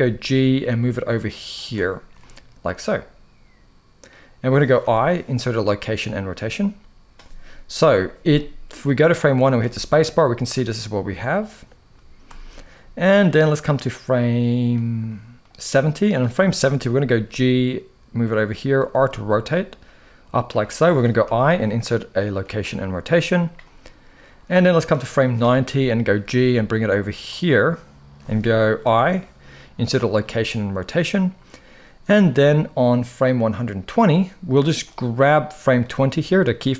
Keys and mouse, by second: 1.9-3.8 middle drag, 4.5 i, 7.4 KP_1, 8.5-9.3 drag, 9.3 space, 11.9 space, 12.9-14.4 drag, 15.1-15.8 drag, 16.8 g, 18.6 r, 21.0 i, 24.2-25.1 drag, 25.9 g, 28.6 i, 32.5-33.6 drag, 34.6-35.5 drag.